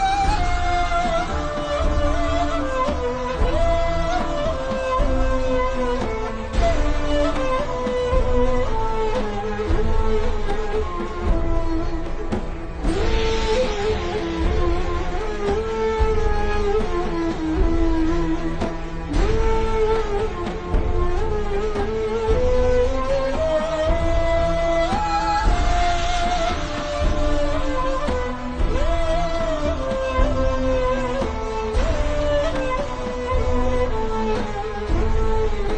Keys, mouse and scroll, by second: 0.4 BackSpace, 1.1 click, 1.9 a, 2.2 click, 3.7 z, 4.2 click, 6.1 z, 6.2 click, 9.3 click, 9.8-11.9 typing, 10.2 click, 10.9 click, 11.4 click, 12.2 click, 15.4-15.8 scroll down 1, 15.8 click, 18.9 p, 19.8 click, 20.7 ctrl+z, 21.7 click, 22.4 click, 25.6 p, 26.2 click, 26.8 z, 27.2 click, 27.8 z, 28.4 click, 29.4 click, 33.6-34.5 typing, 34.1 click, 34.8 click.